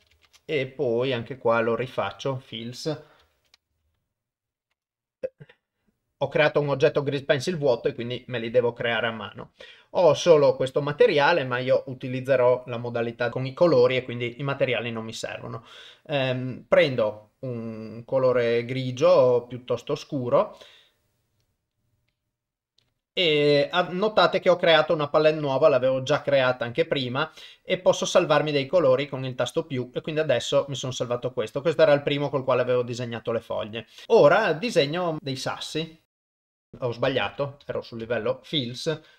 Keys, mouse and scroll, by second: 2.2-4.9 drag, 3.7 l, 6.4-6.8 drag, 8.0 click, 14.3 click, 34.7 click, 36.2 click, 37.2 ctrl+z, 37.7 ctrl+z, 38.0 ctrl+z.